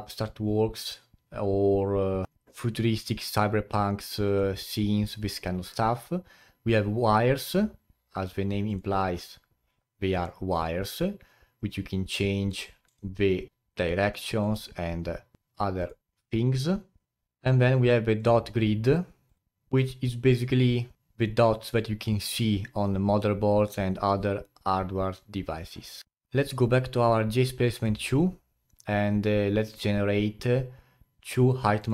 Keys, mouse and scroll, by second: 13.1 click.